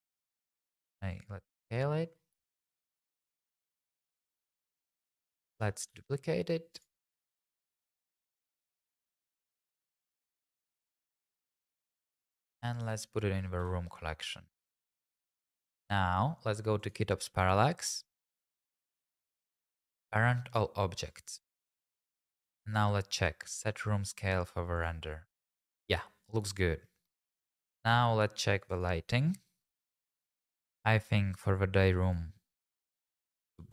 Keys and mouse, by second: 1.1 click, 2.4 shift+z, 2.9 g, 3.0 z, 4.6 shift+click, 4.8 `, 5.9-8.3 typing, 6.7 click, 7.8 click, 8.9 click, 10.4 shift+z, 11.5 middle click, 12.4 click, 12.7 ctrl+click, 13.2 middle click, 13.6 m, 18.6 click, 21.6 click, 24.7 click, 27.6 shift+click, 30.0 click, 32.0 click, 33.2 click.